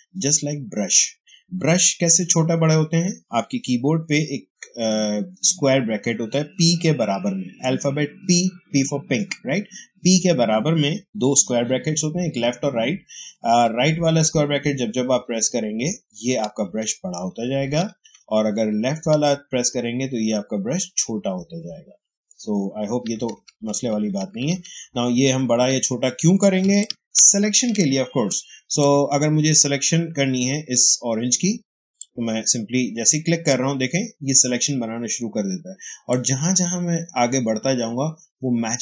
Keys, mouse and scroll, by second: 13.5-17.8 typing, 19.0-26.5 typing, 26.7-31.2 ctrl+drag, 31.9-35.8 drag, 36.0-38.8 drag.